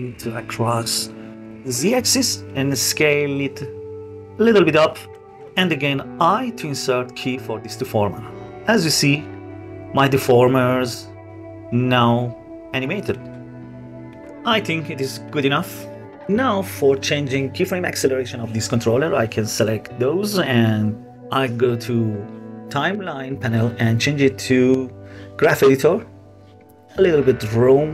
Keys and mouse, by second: 1.9 s, 4.3 click, 5.8 i, 7.3-8.1 drag, 8.1-8.7 middle drag, 9.4 click, 11.4 click, 11.8-12.7 drag, 13.1-13.7 middle drag, 14.7-16.3 middle drag, 24.3 click, 25.8 drag, 26.7-27.8 drag.